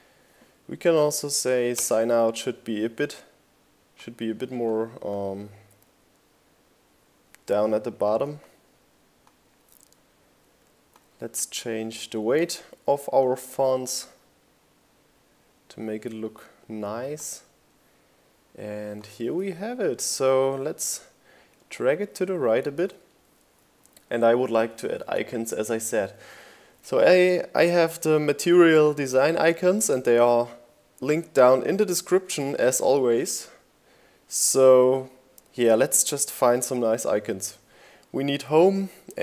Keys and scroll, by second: 15.4 shift+Right, 18.5 shift+Left.